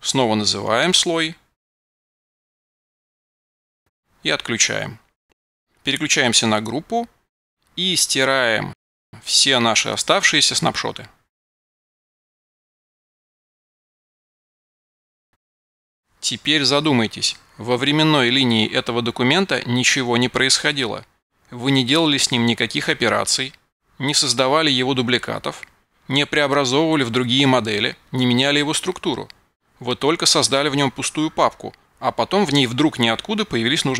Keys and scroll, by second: 0.0-2.7 typing, 3.1 Return, 6.0 alt+].